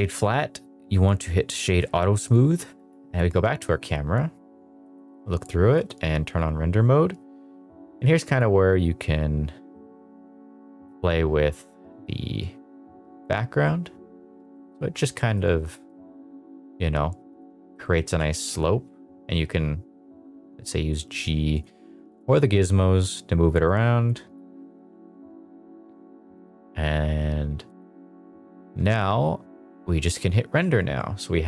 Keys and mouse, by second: 0.1-1.8 right drag, 2.7 KP_0, 5.1 click, 5.7 click, 8.4-13.2 drag, 14.5 middle click, 15.1 middle click, 15.7 middle click, 17.2 drag, 17.8 middle click, 18.2 g, 18.2 y, 21.5 click, 22.0 click, 23.1 click, 24.2 KP_0, 27.6 click.